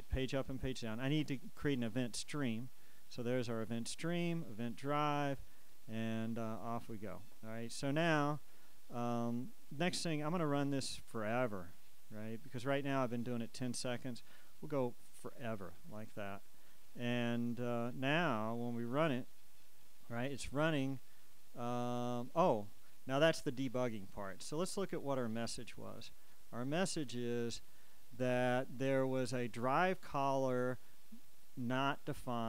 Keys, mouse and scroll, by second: 1.1 click, 2.3 click, 3.8-6.2 drag, 6.5 click, 8.1 click, 10.8 click, 12.2 click, 15.4 click, 16.9 click, 18.2-19.7 drag, 26.4-31.4 drag.